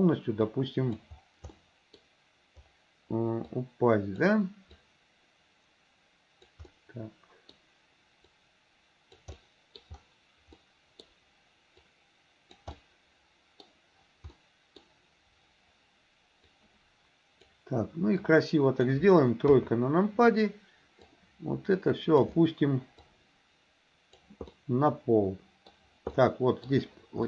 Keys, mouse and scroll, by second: 0.5 click, 1.6 middle click, 3.5 click, 4.8-6.6 drag, 6.8 middle click, 8.3 click, 9.4 middle click, 10.6 middle click, 11.9 click, 12.8 middle click, 14.4 middle click, 16.5-17.5 drag, 18.3 click, 19.5 KP_3, 21.1-22.3 drag, 23.1-24.3 drag, 24.5-25.8 middle drag, 26.1 middle click.